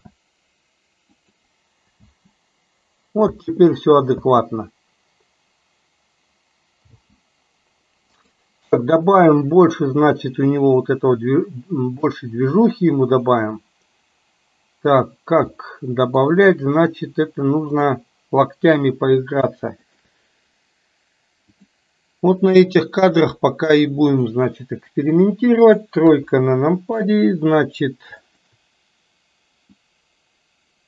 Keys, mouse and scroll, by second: 0.0 shift+d, 2.0 space, 3.4 space, 3.8-4.2 drag, 4.4 space, 7.1 space, 8.2 click, 12.2-15.1 middle drag, 15.6-16.3 middle drag, 17.7 click, 19.8-20.2 shift+drag, 21.7-24.5 drag, 25.2 click, 26.1 KP_3, 28.2 shift+click, 29.7 click, 30.2-30.8 drag.